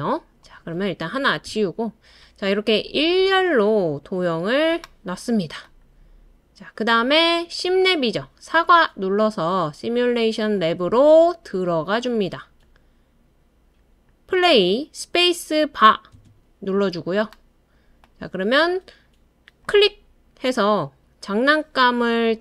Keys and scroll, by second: 1.4 BackSpace, 16.1 space.